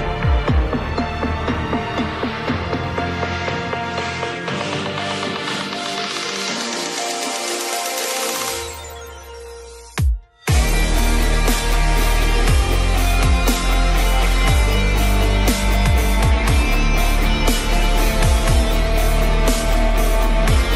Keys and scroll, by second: 0.2 Return, 20.1 ctrl+0.